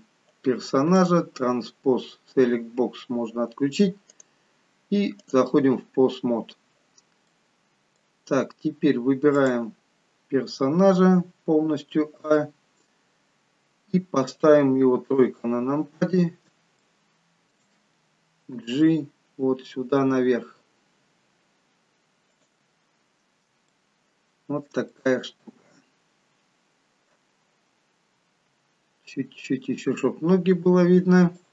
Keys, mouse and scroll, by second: 1.5 click, 2.0-2.7 scroll down 2, 2.7-3.7 scroll down 2, 4.5 click, 7.3 middle click, 8.5-9.1 scroll up 3, 9.4 click, 12.2 a, 12.9-14.6 scroll down 6, 15.1 KP_3, 16.8 shift+middle click, 18.5 g, 22.8-23.5 scroll up 1, 23.8 shift+middle click, 23.8-24.9 scroll up 4, 24.9 middle click.